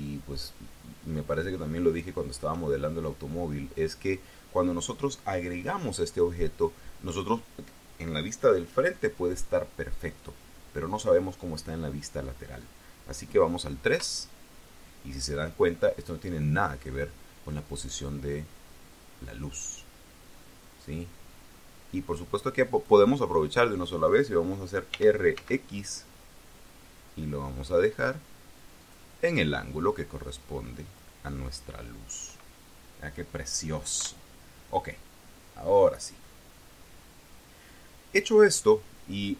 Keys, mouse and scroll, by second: 2.1 shift+click, 2.6-3.0 shift+scroll up 2, 13.8 KP_3, 16.0 scroll up 2, 19.1-22.9 drag, 24.8 r, 25.2 x, 28.6 click, 29.8-31.0 drag, 33.8 KP_1, 35.6-36.2 scroll up 4.